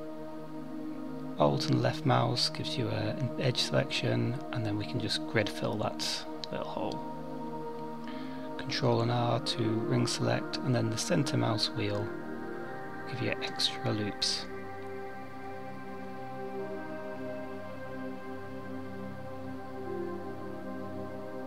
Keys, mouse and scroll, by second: 0.1 alt+click, 2.6 click, 8.2 ctrl+r, 13.3-13.8 scroll down 4, 13.8 middle click, 16.5 KP_7, 18.1 3, 20.8 c.